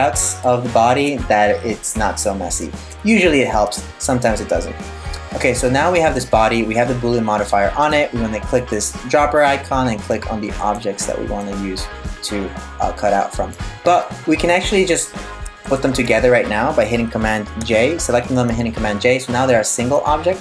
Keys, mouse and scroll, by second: 5.7 right click, 7.4 click, 11.0 middle click, 14.5 right click, 15.3 shift+right click, 17.2 super+j, 19.6 middle click.